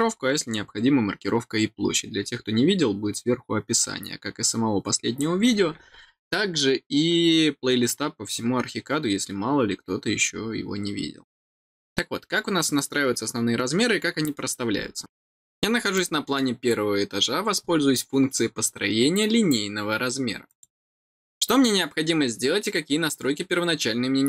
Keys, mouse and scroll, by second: 1.8-2.1 scroll down 1, 2.8 scroll down 1, 8.8 scroll down 1, 15.9 middle click, 20.4 click.